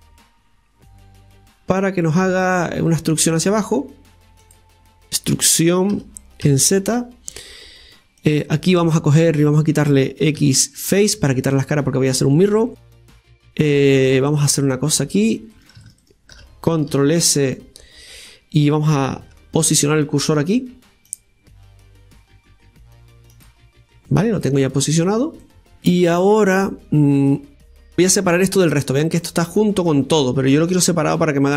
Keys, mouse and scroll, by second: 2.8-4.4 middle drag, 4.4 click, 5.1 KP_1, 5.9 e, 8.8-9.5 middle drag, 9.5-10.4 scroll up 1, 10.4 x, 13.7-14.8 right drag, 14.8 click, 15.5-16.9 right drag, 16.9 shift+s, 19.2 Tab, 21.1-24.1 drag, 24.2 scroll down 2, 24.4 middle click, 25.0-25.4 scroll down 2, 25.4 middle click, 26.4 right click, 26.9-28.4 scroll down 1, 28.4-29.4 middle drag.